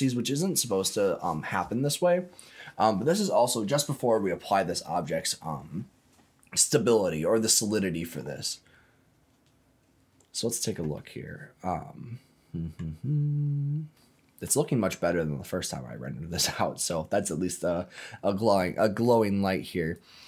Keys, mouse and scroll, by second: 10.9-12.7 middle drag, 13.1-13.9 scroll up 5, 13.9 middle click, 14.4-15.0 scroll down 3, 15.0-17.9 middle drag, 18.6 middle click, 19.9-20.2 drag.